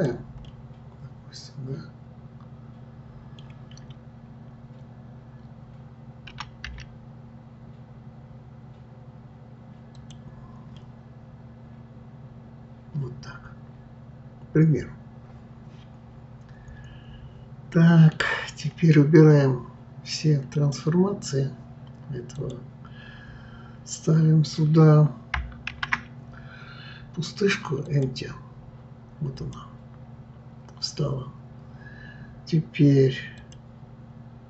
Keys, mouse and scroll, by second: 0.4-3.4 middle drag, 10.8-13.8 middle drag, 20.5 click, 22.4 click, 25.7 shift+a, 33.4 click.